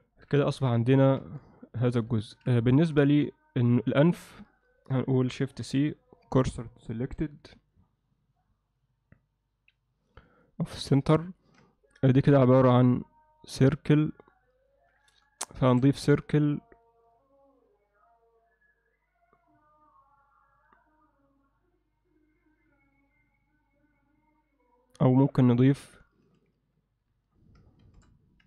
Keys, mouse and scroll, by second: 0.1 ctrl+alt+middle click, 0.5 shift+middle click, 0.9 ctrl+alt+middle click, 1.6 alt+shift+middle click, 1.7 alt+shift+right click, 2.1 ctrl+alt+middle click, 2.7 ctrl+alt+middle click, 5.6 shift+c, 10.4 ctrl+alt+middle click, 10.9 ctrl+alt+middle click, 15.7 shift+a, 27.8 shift+c.